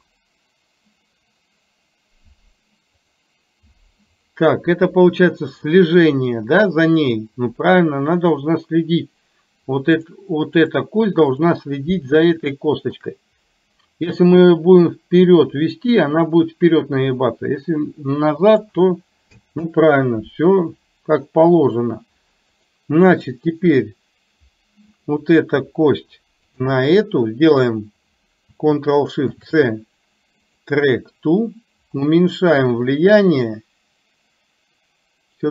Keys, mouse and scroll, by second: 3.2 click, 10.2 click, 12.7 shift+middle click, 15.0-18.8 drag, 22.5 click, 26.7 shift+click, 29.3 ctrl+shift+c, 32.2-35.5 drag.